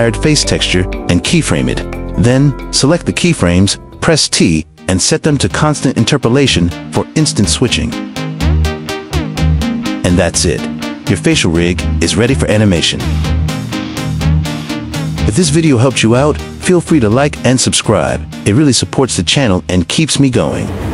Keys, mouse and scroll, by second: 0.4 g, 0.8 g, 1.8 click, 2.4-2.8 drag, 4.6 t, 8.1 g, 10.5 click, 11.0 g, 11.7 click, 12.1 g, 12.4 click, 12.8 g, 13.1 click, 13.7 space, 14.0 space, 14.1 drag, 15.0 click, 15.2 s, 15.4 drag, 15.7 s, 17.3 g, 19.3 g, 19.7 click, 20.5 space.